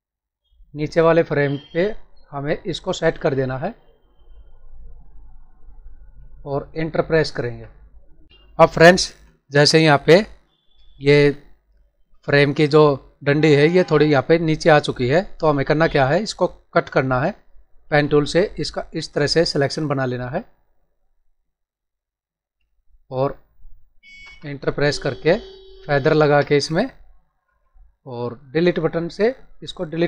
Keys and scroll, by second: 8.7 ctrl+=, 9.5 space, 24.2 ctrl+Return, 26.1 alt+s, 26.4 alt+f, 29.8 Delete.